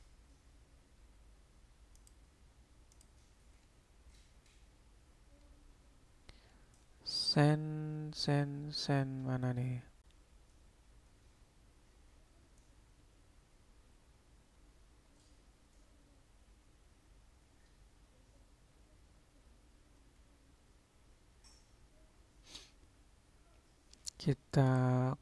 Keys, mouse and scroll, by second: 3.0-25.2 drag.